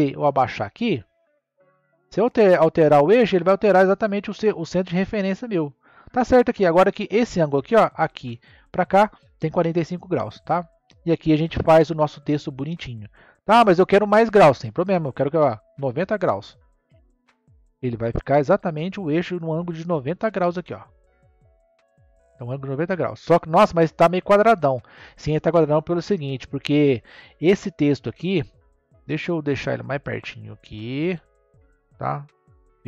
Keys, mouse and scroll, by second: 5.3 scroll up 1, 10.0-10.8 middle drag, 10.8-11.5 scroll down 2, 11.5-13.5 middle drag, 13.5 click, 15.1-18.1 drag, 18.1-21.2 middle drag, 23.0-23.6 scroll down 2, 23.6-26.7 middle drag, 28.3 click, 32.3 KP_3.